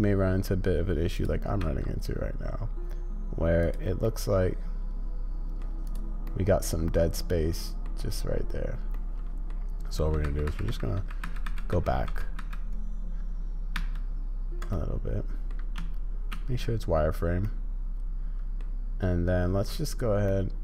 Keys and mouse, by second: 1.1 click, 4.0-5.6 drag, 6.3-7.9 middle drag, 8.9-9.5 middle drag, 14.7 click, 17.4-18.6 drag, 20.3 click.